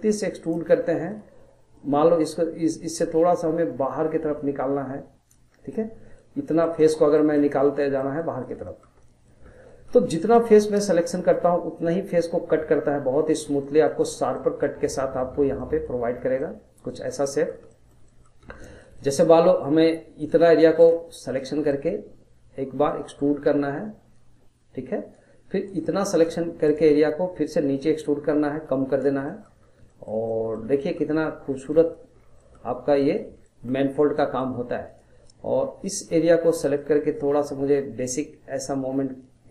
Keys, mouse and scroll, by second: 0.4 click, 0.9 middle click, 1.8 click, 5.5 scroll, 5.7 middle click, 6.3-6.7 scroll, 6.7 shift+middle click, 6.9 scroll, 7.2 middle click, 7.6 scroll, 7.8-9.4 shift+middle drag, 9.4 scroll, 9.7-10.7 shift+middle drag, 10.7 click, 11.1 middle click, 12.1 click, 13.6 middle click, 14.1 scroll, 14.3-15.3 middle drag, 15.3 scroll, 15.6 middle click, 16.2 scroll, 16.4 middle click, 17.1 scroll, 17.3-18.4 middle drag, 18.4 scroll, 18.7-20.2 shift+middle drag, 20.2 click, 20.8 shift+click, 21.2 shift+click, 21.7-22.9 middle drag, 22.9 click, 25.6 click, 26.1 shift+click, 26.7 shift+click, 27.4 click, 29.2 middle click, 29.6 scroll, 29.9-32.1 shift+middle drag, 32.1 scroll, 32.4 middle click, 32.7 scroll, 33.0-34.8 shift+middle drag, 34.8 click, 36.0 shift+click, 36.8 click.